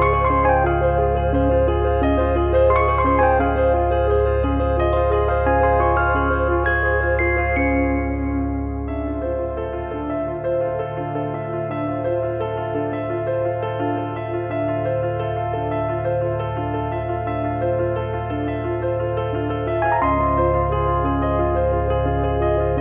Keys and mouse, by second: 3.9 3, 4.2 click, 4.6 click, 6.0 Delete, 6.7 click, 7.5 Delete, 7.7 click, 8.9 Delete, 9.8 click, 10.1 click, 11.4 click, 12.5 click, 13.0 click, 13.4 click, 15.0 click, 18.6 click, 20.6 click, 21.8 click.